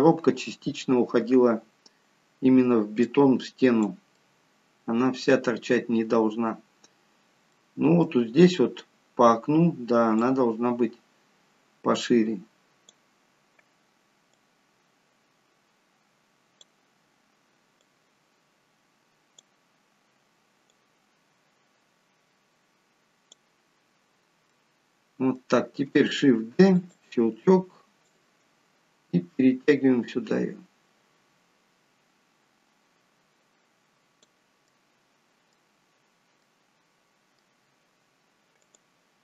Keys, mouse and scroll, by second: 2.2-2.5 scroll down 1, 3.0 click, 4.2 middle click, 5.6-6.0 scroll up 1, 6.9-7.5 scroll down 1, 7.5 middle click, 10.2 click, 14.3 click, 17.8 click, 20.7 click, 24.0-24.5 scroll down 1, 24.5 middle click, 26.5 shift+d, 28.0 click, 34.6 middle click, 35.8-36.4 scroll up 2, 36.4 middle click, 36.4-36.9 scroll up 2, 37.6-38.4 scroll down 1, 38.6 click.